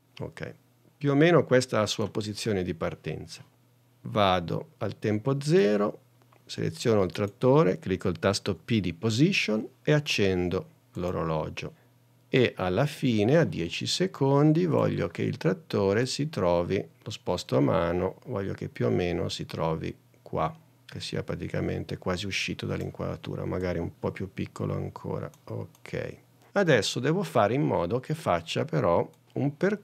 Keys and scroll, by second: 8.6 p.